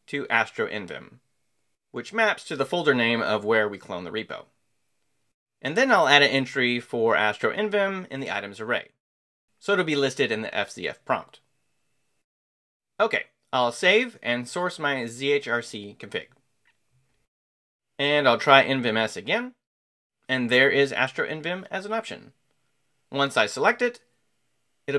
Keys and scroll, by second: 0.0-2.4 typing, 4.4 Escape, 6.0 j, 7.4-11.0 typing, 11.1 Escape, 13.2 Escape, 13.3-14.7 typing, 23.5 Return.